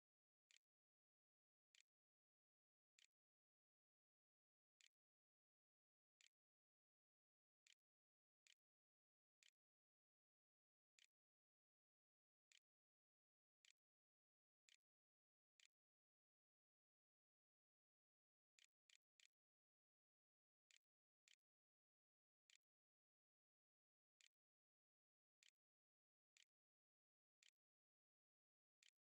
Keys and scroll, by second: 0.0-11.0 typing, 12.1-16.1 typing, 17.4 r, 18.4 BackSpace, 18.7 BackSpace, 19.0 BackSpace, 20.5-27.2 typing, 22.1 Tab, 28.6 Tab, 28.8-29.0 typing.